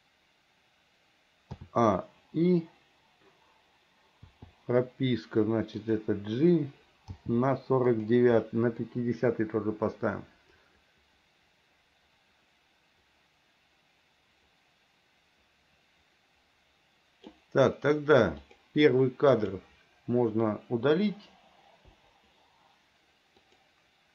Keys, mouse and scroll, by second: 1.7 a, 4.4 i, 5.9 click, 7.3 g, 9.0-17.5 drag, 18.5 click, 19.4 click, 22.0 Delete, 23.6 click.